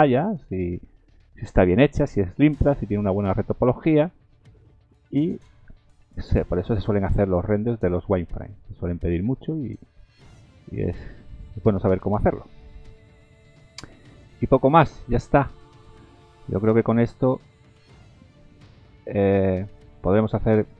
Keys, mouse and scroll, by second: 18.8-19.4 scroll up 2, 19.4-20.7 scroll down 2.